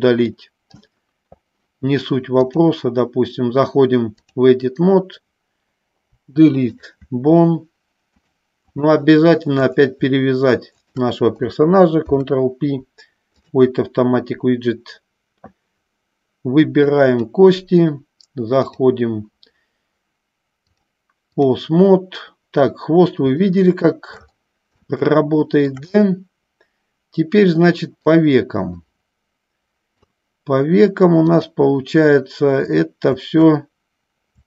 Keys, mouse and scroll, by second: 2.4-4.6 drag, 6.3 Delete, 8.5 click, 9.8 click, 12.2 ctrl+p, 17.1 click, 18.7 click, 20.8 click, 23.6 shift+middle click, 25.2 shift+middle click, 26.3-28.4 middle drag, 29.0-30.3 middle drag, 31.4-33.9 drag.